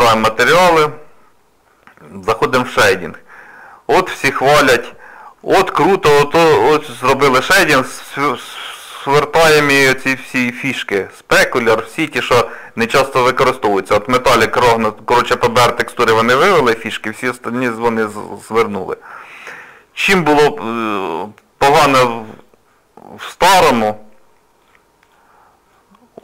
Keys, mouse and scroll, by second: 19.6 click, 21.1 click, 22.3 click, 24.6 click, 25.0 click.